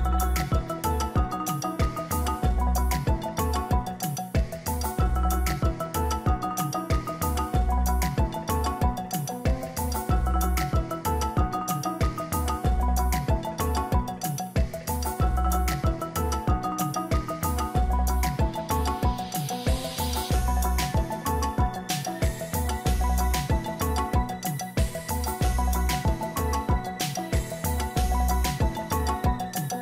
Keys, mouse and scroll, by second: 2.0-2.7 scroll down 3, 7.5-8.9 scroll down 7, 8.9 scroll, 9.1 shift+click, 10.7 ctrl+g, 17.2-18.7 scroll down 5, 28.3-29.1 ].